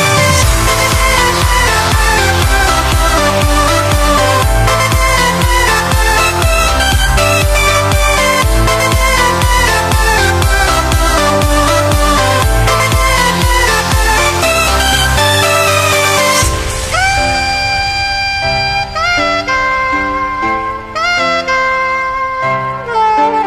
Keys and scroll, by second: 7.9 super+=, 8.1 super+=, 8.4 super+=, 8.6 super+=, 13.2 b, 19.6 super+z, 20.4 super+z, 22.3 super+z.